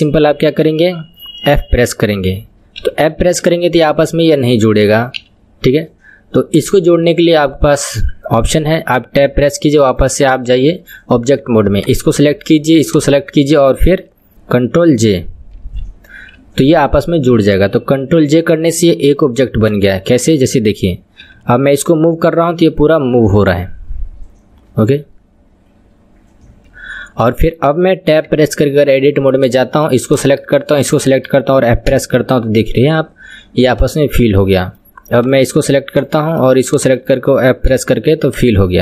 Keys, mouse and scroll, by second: 9.3 Tab, 10.1 click, 12.1 click, 13.0 shift+click, 15.8 ctrl+j, 19.8 click, 20.2 click, 21.2 g, 28.4 Tab, 29.5 click, 30.1 click, 30.9 shift+click, 31.9 f, 33.8 click, 34.2-35.2 middle drag, 35.2 click, 36.0 click, 36.8 shift+click, 37.8 f, 38.4 click, 38.7 middle click.